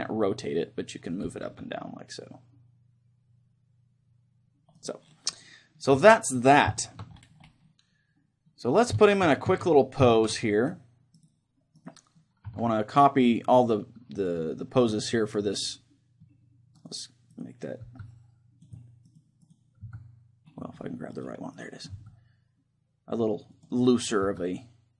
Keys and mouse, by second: 0.6-2.5 middle drag, 5.1-6.9 right drag, 5.3-11.2 middle drag, 5.5 click, 6.0 a, 11.2-14.5 right drag, 12.5 a, 14.5-17.6 middle drag, 16.9-23.5 right drag, 18.0 s, 20.1 s, 21.9 s, 23.9-24.9 drag, 24.1-24.9 right drag, 24.2 s.